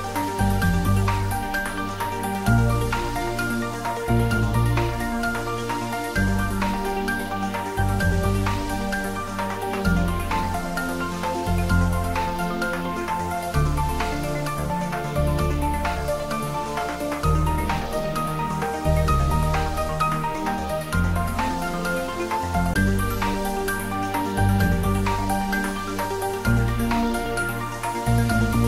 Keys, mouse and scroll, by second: 1.0-1.6 scroll up 1, 2.7 Tab, 3.0 scroll up 1, 3.6 Tab, 4.1 click, 4.5 Tab, 4.9-5.5 middle click, 5.7 scroll up 1, 7.1 click, 9.0 2, 9.6 click, 14.6-15.0 shift+scroll down 1, 15.0-15.6 middle click, 16.1 e, 17.1 click, 17.6 s, 18.8 click, 20.9 shift+z, 23.5 g.